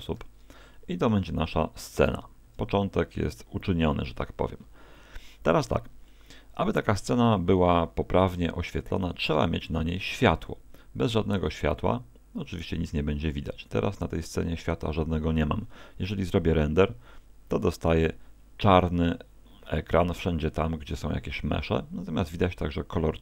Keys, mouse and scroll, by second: 0.2 ctrl+2, 0.8 middle click, 1.2 middle click, 2.0 KP_0, 6.1 middle click, 12.6-13.7 scroll down 1, 13.7-14.2 scroll down 2.